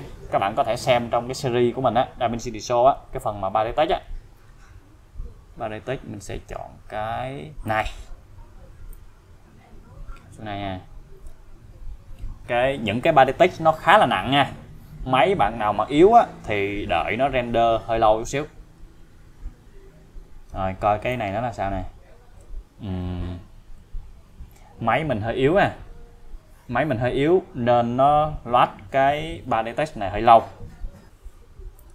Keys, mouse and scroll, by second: 4.8 scroll down 1, 7.7 click, 8.9-11.4 click, 21.1-22.7 click, 31.8 click.